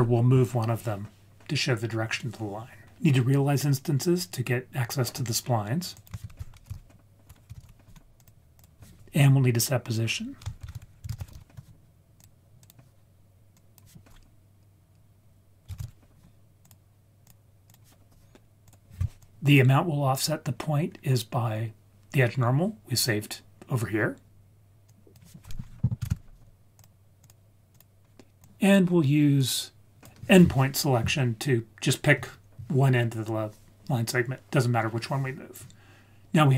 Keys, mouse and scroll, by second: 5.9 click, 6.2 shift+a, 10.6 shift+a, 13.5-16.7 drag, 17.2-18.7 drag, 19.2 click, 20.4 scroll down 2, 20.8-22.2 scroll up 4, 24.8-26.8 drag, 27.2-27.8 drag, 28.4 click, 29.3 click.